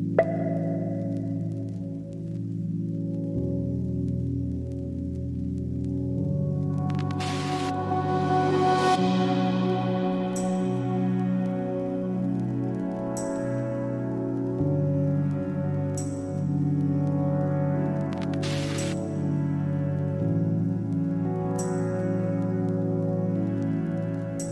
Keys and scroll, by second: 1.5-2.5 typing, 22.1 3, 23.9 ,.